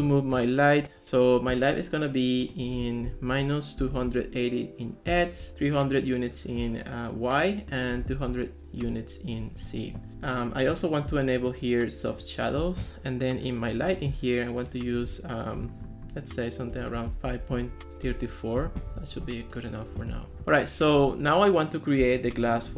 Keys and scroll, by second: 3.1-4.6 typing, 5.1 Return, 7.8-8.7 typing, 8.8 Return, 10.1 Escape, 16.7-18.1 typing.